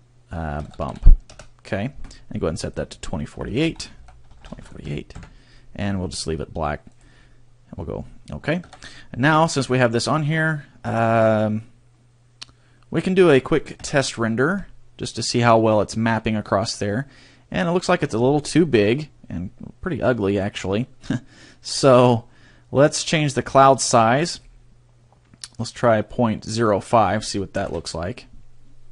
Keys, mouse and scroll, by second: 8.7 Tab.